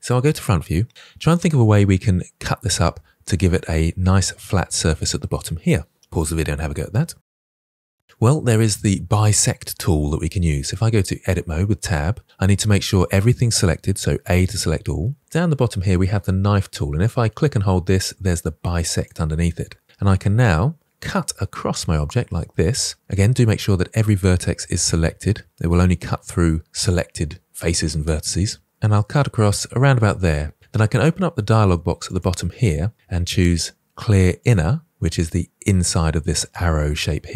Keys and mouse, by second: 0.1 KP_1, 11.3 Tab, 14.1 a, 17.1-18.7 drag, 18.9 click, 34.3 click.